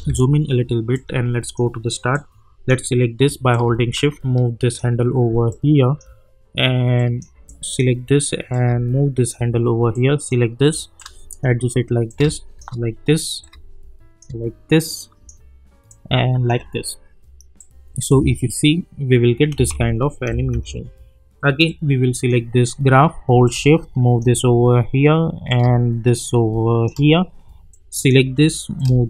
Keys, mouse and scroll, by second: 0.9-9.9 drag, 8.8 shift+click, 17.6 click, 18.1 space, 21.6-25.5 drag, 25.5-27.7 drag, 27.7-29.0 drag.